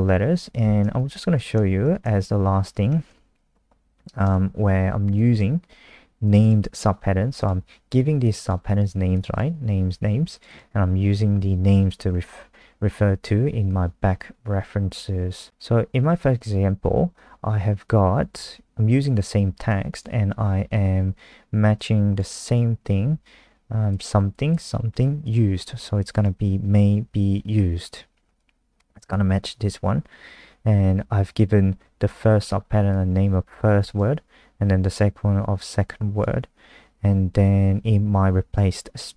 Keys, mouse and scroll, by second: 0.8 ctrl+v, 1.3 click, 2.7 shift+Home, 4.2 BackSpace, 6.2 click, 6.4 click, 7.3 click, 8.4 click, 9.1 click, 9.3 click, 10.3 click, 10.4 click, 19.6 click, 26.1 click, 28.4 click.